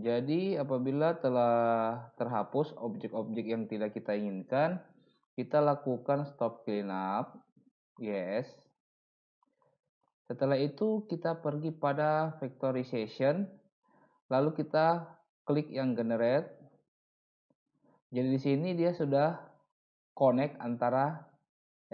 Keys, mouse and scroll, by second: 2.3 middle click.